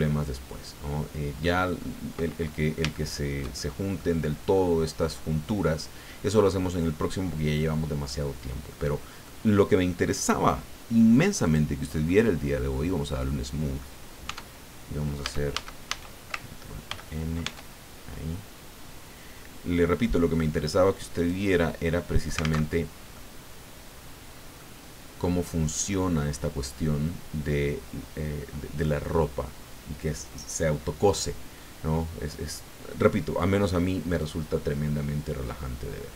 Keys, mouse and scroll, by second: 1.8 scroll up 1, 2.2 middle click, 3.6 shift+middle click, 4.5 middle click, 5.7-8.2 middle drag, 8.4 scroll down 1, 8.7 click, 11.4 click, 12.0-14.0 drag, 14.2 Tab, 15.2 a, 16.8 ctrl+n, 17.4 ctrl+Tab, 21.1 click, 23.1 middle click, 23.4-24.7 drag, 34.2-36.1 drag.